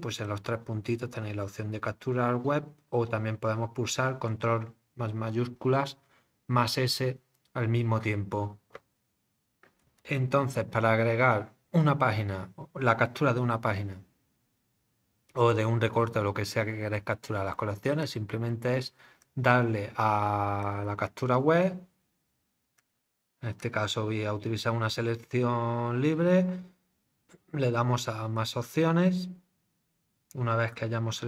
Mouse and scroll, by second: 0.2 click, 18.0 click, 19.2 click, 20.6 click, 22.8 click, 23.6 click, 28.3-30.7 drag.